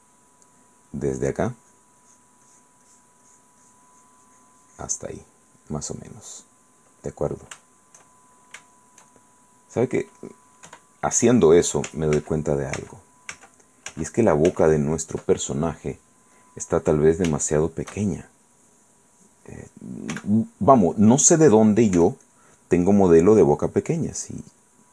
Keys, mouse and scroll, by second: 1.2-2.2 drag, 5.3-7.1 middle drag, 7.2 middle click, 7.8 shift+middle click, 8.7-10.5 shift+middle drag, 10.9 KP_1, 12.4 ctrl+z, 15.9 ctrl+click, 16.6 click, 17.5 shift+click, 20.3 f, 21.0 click, 22.2 f, 22.4 click, 23.6-24.6 drag, 24.8 click.